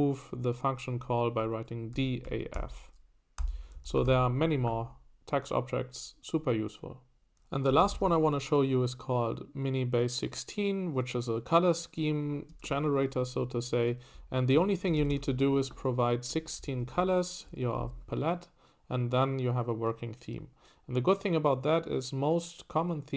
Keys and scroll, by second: 1.7-4.3 typing, 7.4-8.5 typing, 12.7 Escape, 14.1-15.7 typing, 16.6 Escape, 16.7-17.8 typing.